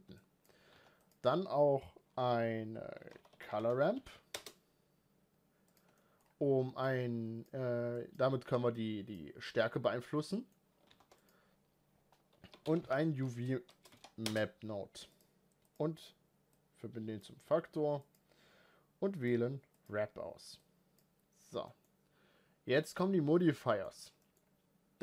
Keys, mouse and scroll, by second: 0.2-4.4 drag, 7.5-15.8 drag, 17.2 click, 18.5-21.5 drag, 21.5 scroll down 2, 21.7-23.9 middle drag, 23.9-25.0 scroll up 3, 24.2 middle click.